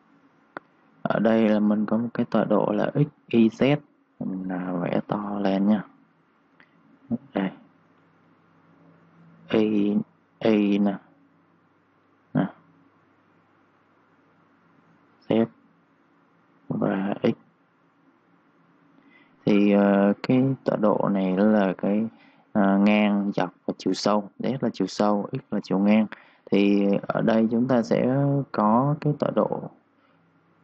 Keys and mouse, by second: 0.0-0.3 typing, 4.8 ctrl+shift+d, 29.0 Escape, 30.3 click.